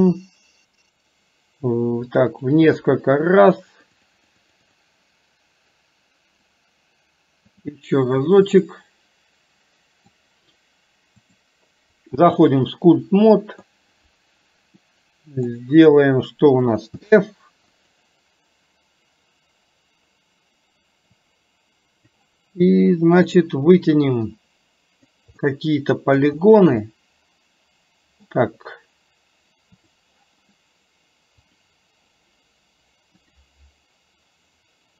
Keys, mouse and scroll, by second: 2.0 click, 3.1 click, 3.9 click, 4.7 click, 6.5-7.8 right drag, 8.8-10.3 middle drag, 11.3-12.8 drag, 13.3 middle click, 14.9 middle click, 17.0 f, 21.2 click, 23.2 click, 24.4 click, 25.4 middle click, 26.9-28.4 middle drag, 29.9 click, 31.6 click, 33.5-34.9 drag.